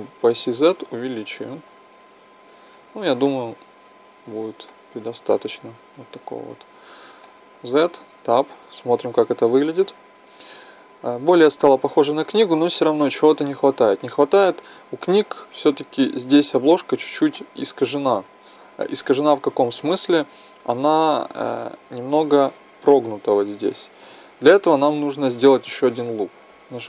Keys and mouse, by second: 3.3-10.0 middle drag, 6.8 z, 8.0 Tab, 12.4-14.2 middle drag, 15.0-26.5 middle drag, 26.5 Tab.